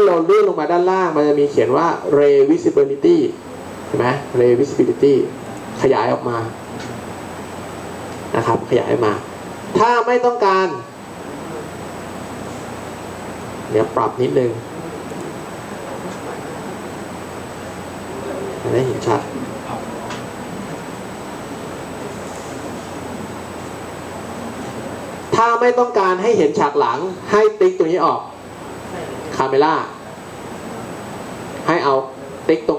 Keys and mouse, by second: 16.3 n.